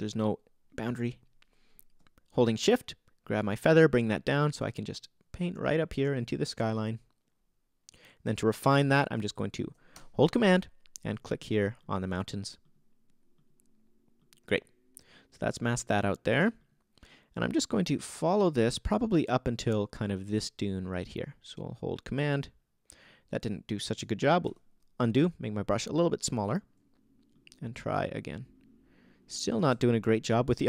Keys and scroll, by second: 24.5 super+z.